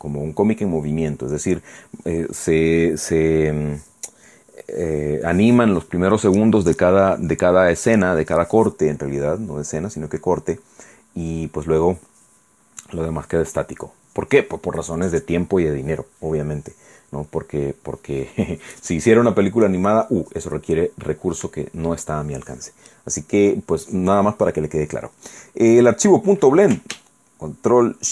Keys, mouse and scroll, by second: 25.4-25.8 scroll down 2, 25.8-26.2 scroll up 2.